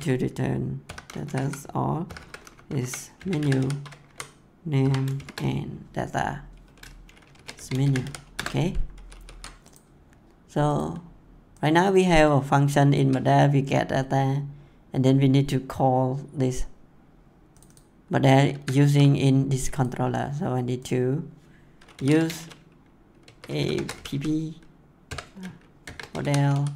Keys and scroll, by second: 0.8 ;, 1.2 Left, 2.0 ', 2.7 Left, 3.3 e, 4.0 Right, 5.1 shift+., 7.1-8.2 typing, 8.3 Return, 8.9 ctrl+s, 18.4 ctrl+c, 18.7 ctrl+s, 21.9-23.8 typing, 25.0 \, 25.8 shift+m, 26.1 o.